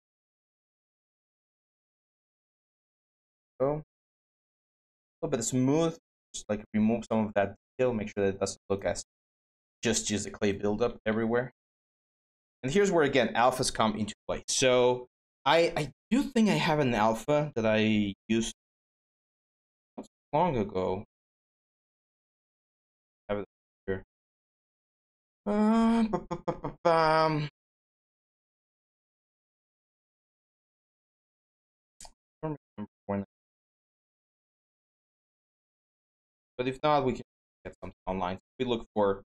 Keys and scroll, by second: 36.2 alt+Tab.